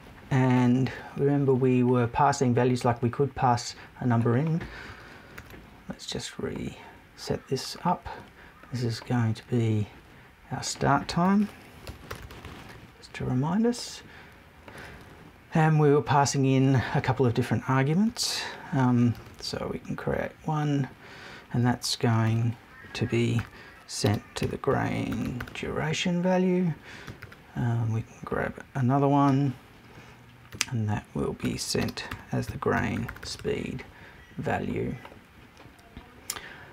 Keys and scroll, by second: 11.8 shift+BackSpace, 12.4 BackSpace.